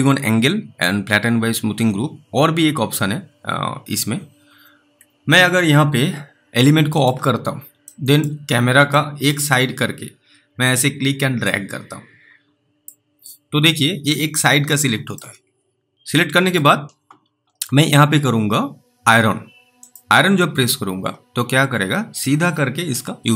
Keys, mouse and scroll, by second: 5.0-5.4 scroll down 2, 7.0 click, 7.4 scroll down 1, 8.4-8.7 scroll up 2, 9.2 alt+middle click, 10.8-11.8 scroll down 1, 11.8 click, 14.0 alt+middle click, 15.9 scroll up 1, 16.4 middle click, 19.9 click.